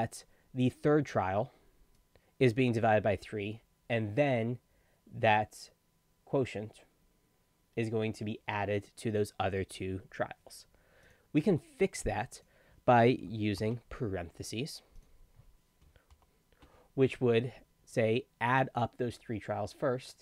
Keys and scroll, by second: 13.6 shift+9, 16.1 shift+0.